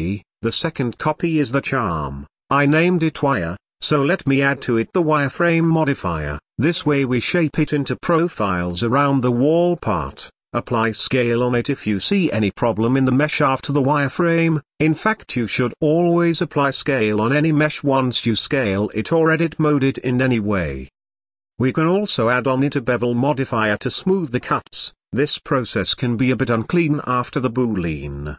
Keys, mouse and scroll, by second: 2.7-4.9 drag, 5.3 scroll up 1, 5.4-5.9 middle drag, 5.9-6.6 scroll up 3, 6.7 ctrl+a, 11.1-15.4 drag, 16.4-18.1 drag, 18.1-19.1 shift+middle drag, 19.1-19.5 scroll up 1, 19.9-21.7 drag, 23.8-25.9 shift+drag, 27.2-27.5 scroll down 1, 27.7 shift+h, 28.1-28.3 middle drag.